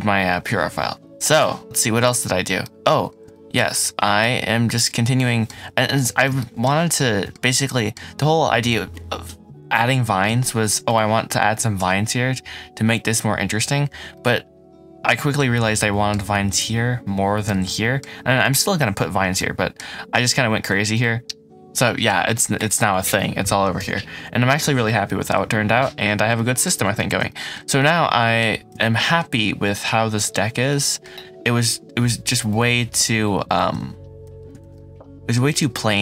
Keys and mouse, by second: 2.5-13.0 middle drag, 14.0-15.3 middle drag, 15.7-16.0 middle drag, 17.3-17.9 middle drag, 19.3 middle drag, 19.4 click, 19.5 middle click, 21.2-22.0 middle drag, 23.7 g, 25.7 Escape, 26.3 middle click, 27.0 ctrl+s, 27.2 shift+middle click, 27.7-33.0 middle drag, 33.3 shift+middle click, 34.2 h.